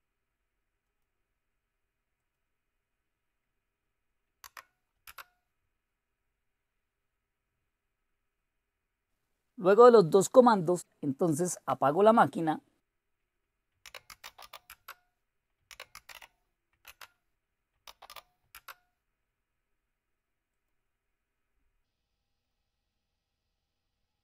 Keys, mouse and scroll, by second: 0.9-2.0 drag, 2.2 click, 4.4 Right, 5.0 Return, 13.5-18.4 typing, 20.5 click, 21.3-22.2 typing, 21.7 click, 22.4 click.